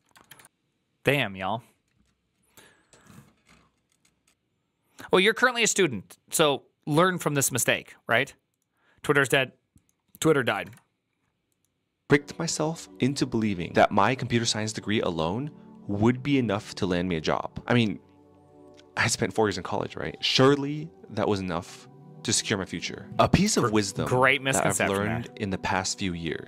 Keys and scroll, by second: 0.1 ctrl+r, 10.4 ctrl+r.